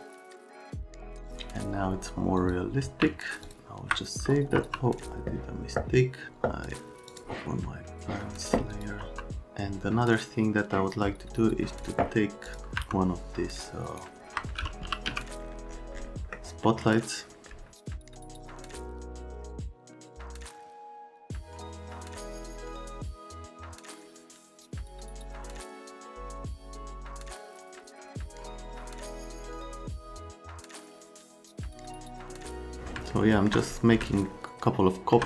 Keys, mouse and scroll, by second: 2.8 x, 7.0 click, 8.7 click, 9.0 F3, 12.8 F3, 13.8 click, 14.6-15.6 typing, 16.3 middle click, 17.5 middle click, 18.0 alt+middle click, 18.6 shift+click, 18.9 click, 18.9 middle click, 19.1 middle click, 19.3 click, 19.6 click, 19.8 middle click, 20.2 middle click, 20.4 alt+right click, 20.7 right click, 20.9 middle click, 21.2 middle click, 21.3 click, 21.4 click, 21.5 z, 21.9 click, 22.2 click, 22.5 x, 22.9 F3, 23.5 click, 23.7-24.5 typing, 24.9 click, 25.0 click, 25.3 alt+middle click, 25.5 shift+click, 25.8 click, 26.1 click, 26.2 middle click, 26.4 click, 26.6 click, 26.8 click, 26.9 alt+middle click, 29.2-29.9 scroll up 4, 29.6 F3.